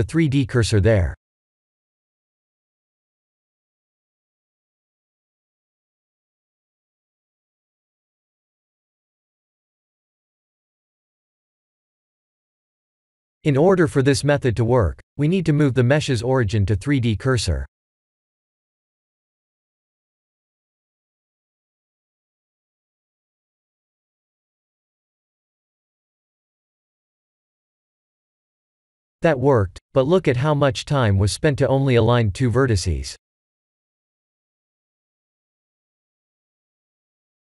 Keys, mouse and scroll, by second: 0.8 click, 1.5 click, 1.6 click, 2.9 click, 3.4 click, 3.7 b, 4.7 b, 6.1 shift+s, 9.5 click, 9.9 b, 13.9 Tab, 15.0 ctrl+a, 16.7 Tab, 18.3 click, 20.8 ctrl+z, 21.2 Tab, 23.9 click, 30.6 Tab, 31.9 click, 33.9 click, 34.3 Tab, 34.6 middle click, 35.6 shift+z, 35.9 middle click, 35.9 middle click.